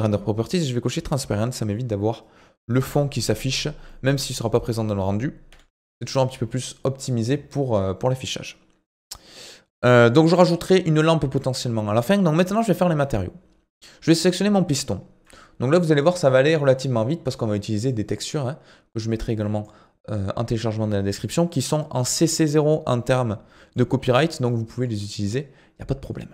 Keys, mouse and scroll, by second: 1.2 scroll down 5, 1.4-3.5 middle drag, 3.5-3.9 scroll up 1, 3.9 middle click, 4.7 click, 6.7 middle click, 7.4 scroll down 3, 7.6-10.6 middle drag, 11.4 middle click, 12.1-12.8 scroll up 1, 12.8-13.8 middle drag, 13.8 click, 15.3-18.3 drag, 19.3-24.0 drag, 24.0-24.5 scroll up 1, 24.5-26.2 middle drag, 26.2 click.